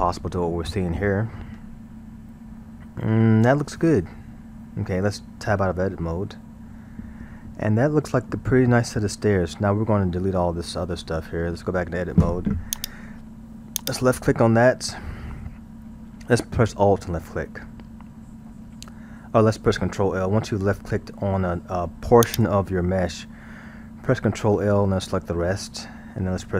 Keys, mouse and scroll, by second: 1.1-1.6 scroll, 1.6-4.7 middle drag, 6.2 Tab, 6.8-11.2 middle drag, 11.2 Tab, 12.8 click, 13.8 click, 22.3 click, 24.5 ctrl+l.